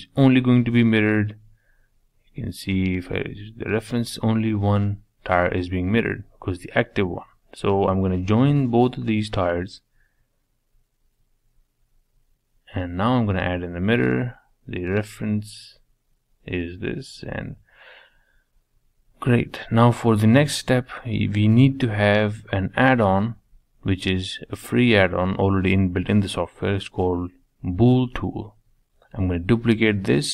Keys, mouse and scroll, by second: 0.6 click, 1.3 click, 3.7-5.6 middle drag, 6.0 ctrl+z, 6.4-7.2 middle drag, 7.2 click, 7.7 click, 9.4 ctrl+j, 9.7-11.3 middle drag, 12.3 click, 12.7-13.7 middle drag, 13.7 click, 14.8-16.7 middle drag, 18.1-19.2 middle drag, 19.2-19.6 scroll up 1, 19.6-21.7 shift+middle drag, 23.1-23.6 drag, 23.6-24.2 scroll down 1, 24.2 click, 24.9 middle click, 25.8 shift+d, 28.0-29.8 drag.